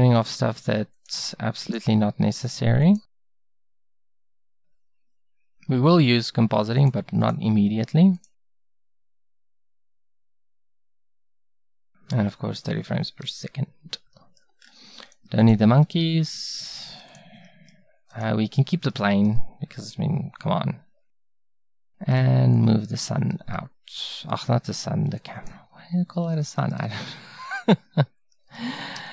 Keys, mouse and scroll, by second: 4.4-6.8 middle drag, 15.3 x, 16.2 x, 17.0 x, 19.3 a, 25.7-29.0 middle drag, 29.0 a.